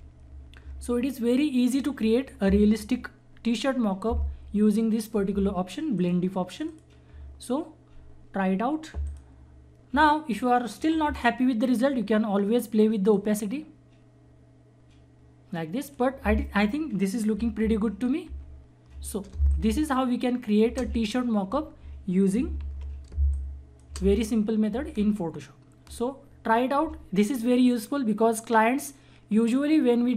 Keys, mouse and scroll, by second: 6.0 click, 9.0 click, 13.1-17.5 drag, 17.5 ctrl+-, 19.3 space, 19.5 click, 19.8 space, 20.7 space, 22.6 ctrl+=, 23.1 space, 23.3 click, 23.6 space.